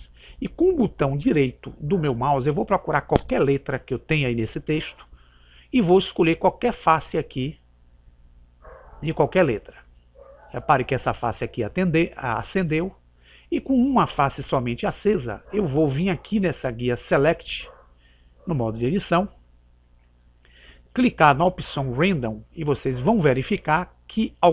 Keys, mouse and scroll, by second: 0.0 click, 9.7-11.5 right drag.